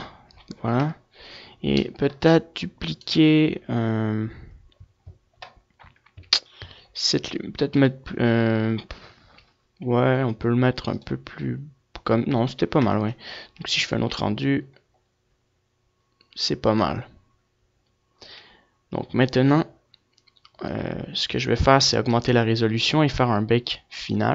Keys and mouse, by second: 1.6 KP_0, 2.5-3.9 middle drag, 3.9-5.3 drag, 5.3 right click, 9.5 KP_7, 13.1-15.1 drag, 15.1 KP_0.